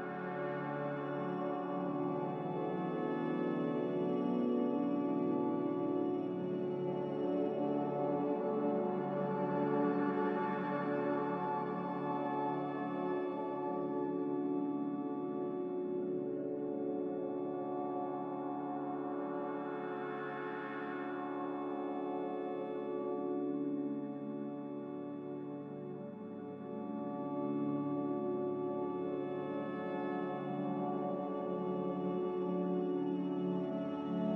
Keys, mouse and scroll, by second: 4.3 ctrl+z, 8.9 ctrl+z, 16.8 Delete.